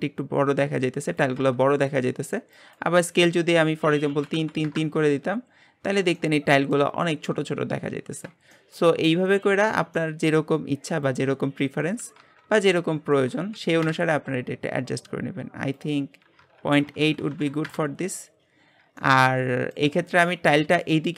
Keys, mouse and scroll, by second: 4.0-5.7 drag, 5.7-6.1 scroll up 3, 6.1 shift+middle click, 6.9-7.9 scroll up 3, 7.9-8.5 scroll down 9, 8.5-8.9 shift+middle drag, 8.9 scroll up 1, 9.1-9.6 middle drag, 9.6-9.9 scroll up 2, 9.9-12.2 shift+middle drag, 12.2-14.2 drag, 14.9-16.7 scroll down 1, 16.7-18.6 drag, 18.6 scroll down 2, 19.0-21.1 middle drag.